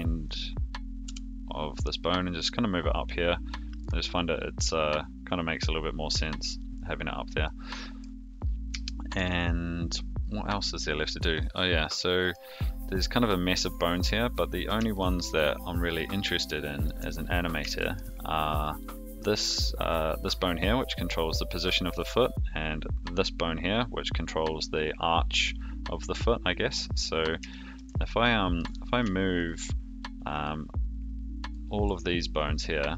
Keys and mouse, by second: 1.0 g, 6.5 click, 7.4 middle click, 8.8 shift+middle click, 11.3 middle click, 14.9-16.8 shift+middle drag, 17.7 shift+middle click, 18.6 click, 19.9 middle click, 27.4 shift+middle click, 28.2 middle click, 29.3 shift+click, 30.3 shift+click, 31.4 shift+click.